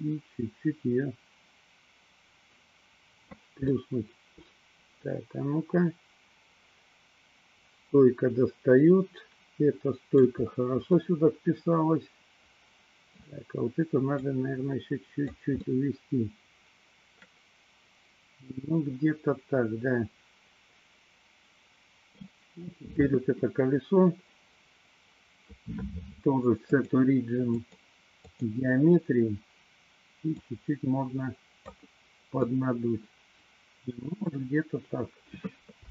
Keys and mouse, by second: 3.8-10.5 middle drag, 11.1-13.2 middle drag, 14.1-15.5 drag, 15.9-22.3 middle drag, 22.6 click, 26.7-28.7 drag, 30.2-31.9 drag, 32.5-34.6 middle drag.